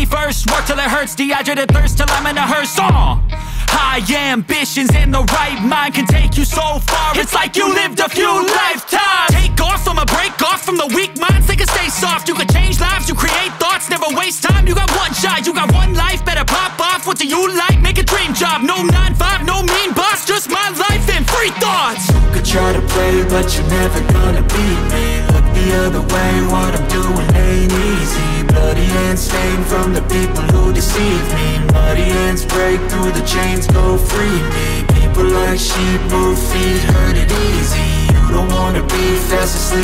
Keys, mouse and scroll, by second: 0.3 drag, 0.7-1.6 drag, 2.1 click, 3.3 click, 3.6 space, 6.1 space, 6.2 drag, 6.3 space, 7.2 space, 7.6 space, 8.7 space, 9.9 space, 11.5 space, 12.0 space, 12.2 shift+middle click, 12.6 click, 12.8-13.6 drag, 14.4 n, 15.0 middle click, 15.4 drag, 18.3 click, 29.8 space, 31.9 space, 32.4 shift+middle drag, 33.3 shift+click, 33.4 shift+a, 38.2 middle click, 39.2 middle click.